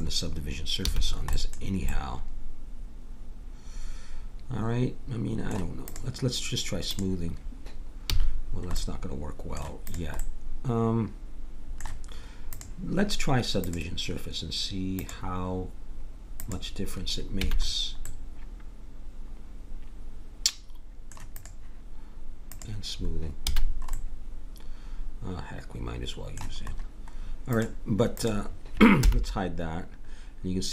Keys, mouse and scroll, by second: 0.9 a, 8.0 a, 9.9-11.4 drag, 12.5-17.7 drag, 17.4 a, 18.3-19.8 middle drag, 21.3-23.5 drag, 23.5 a, 23.7-25.4 middle drag, 27.5-29.0 drag, 29.0 h.